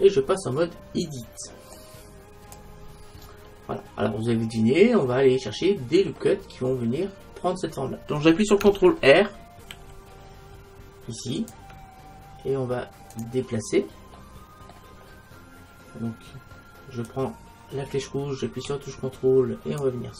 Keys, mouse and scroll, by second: 3.3-3.8 scroll down 1, 3.8-9.8 middle drag, 9.8 ctrl+r, 13.3-15.0 drag, 13.7-16.0 middle drag, 17.1-19.0 drag.